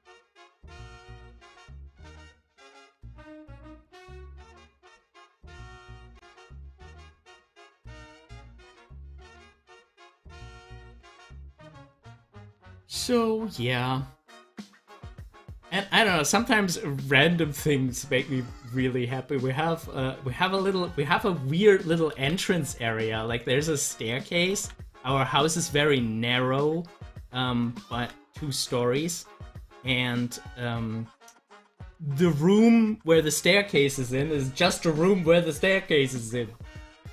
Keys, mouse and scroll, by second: 0.2 scroll up 1, 4.7-7.7 drag, 7.7 ctrl+z, 10.9 ctrl+z, 19.3-22.2 drag, 22.2 ctrl+z, 24.5 ctrl+z, 27.9 ctrl+z.